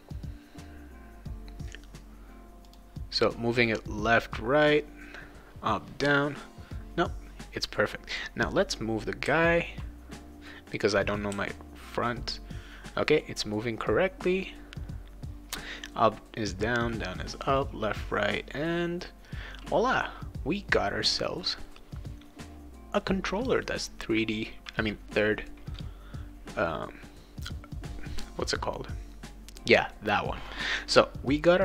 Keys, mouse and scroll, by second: 2.6 click, 9.3 w, 11.3 w, 11.7 w, 23.0-25.9 right drag.